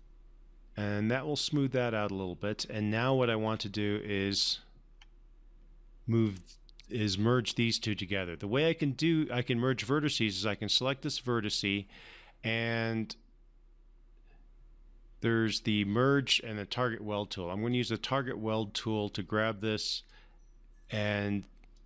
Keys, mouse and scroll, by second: 0.3-3.4 alt+drag, 3.8-4.1 scroll up 1, 4.1 scroll down 1, 4.8-5.3 scroll up 1, 5.9-7.1 scroll up 1, 10.8 click, 18.1-20.7 drag.